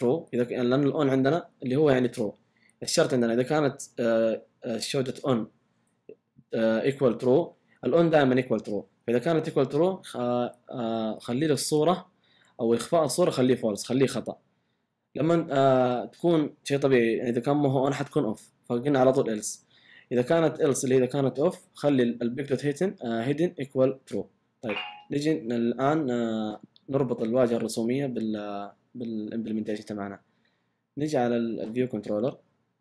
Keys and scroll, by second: 19.5 typing.